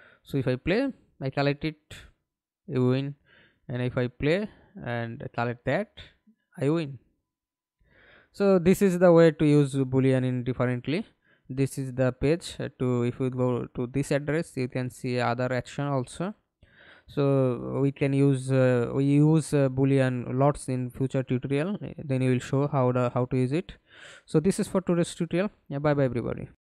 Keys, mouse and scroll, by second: 1.0-2.2 w, 2.8-3.2 a, 3.6 Escape, 4.4 alt+p, 5.0-8.5 typing, 9.0 Escape, 10.5 alt+F9, 11.6-12.2 scroll down 1, 14.7 scroll down 2, 26.3 alt+F9.